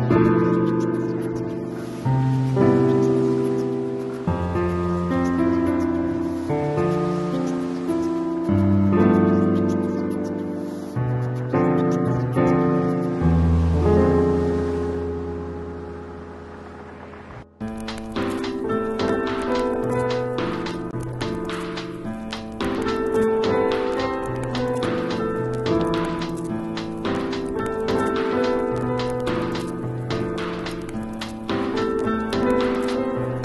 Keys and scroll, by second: 1.2 super+t, 1.8 super+Return, 5.7 super+t, 8.3 alt+super+z, 12.5 Return, 14.6 super+t, 15.3 alt+super+t, 20.0 Return, 24.3 b, 27.9 ], 29.6 [, 33.1 [.